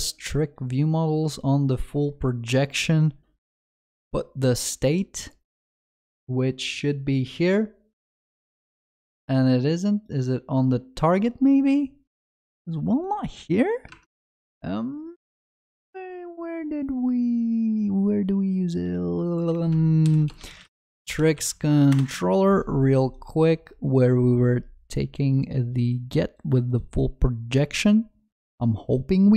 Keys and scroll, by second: 20.1 ctrl+shift+n.